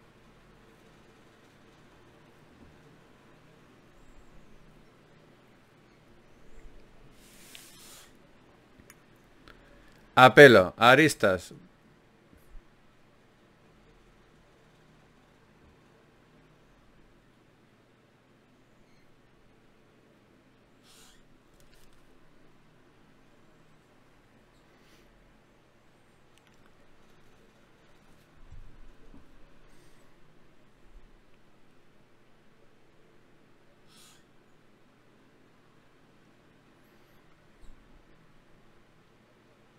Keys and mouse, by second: 2.0-5.1 middle drag, 11.4-13.3 middle drag, 14.1-27.8 middle drag, 32.7 middle click.